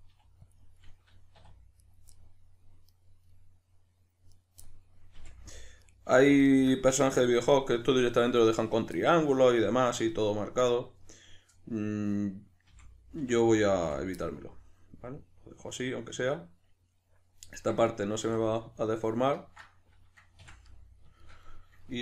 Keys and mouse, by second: 0.0 click, 0.1 g, 0.5 click, 1.4 2, 1.8 right click, 2.1-2.8 middle drag, 2.8 right click, 3.2-4.3 middle drag, 4.3 right click, 4.6-5.2 middle drag, 5.2 f, 5.8 right click, 6.2 f, 6.4-10.6 shift+middle drag, 10.6 right click, 12.7 f, 14.2-22.0 middle drag, 18.2 ctrl+z.